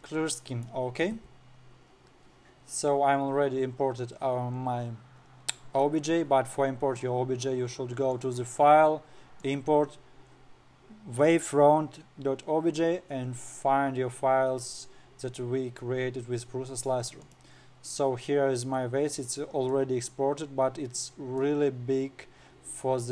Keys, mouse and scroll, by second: 0.5-5.0 middle drag, 5.1-7.9 scroll up 4, 8.6-11.8 drag, 17.8 click, 18.2-18.9 scroll up 8, 19.4-19.9 scroll up 3, 20.2-23.1 middle drag.